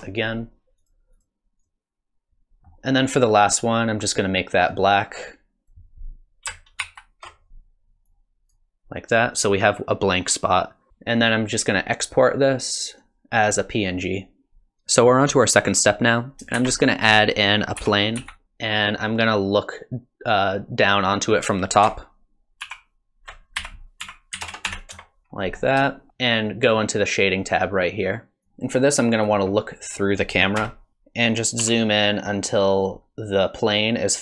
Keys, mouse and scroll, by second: 16.5 shift+a, 18.4 click, 18.4 scroll down 1, 22.6 alt+r, 23.9 r, 25.3 scroll down 2, 25.5-26.0 scroll up 2, 26.0 shift+middle click, 26.1 scroll down 1, 28.5 click, 28.5 scroll down 2, 30.6 KP_0, 30.9 click, 30.9-31.5 scroll down 1, 31.6 s.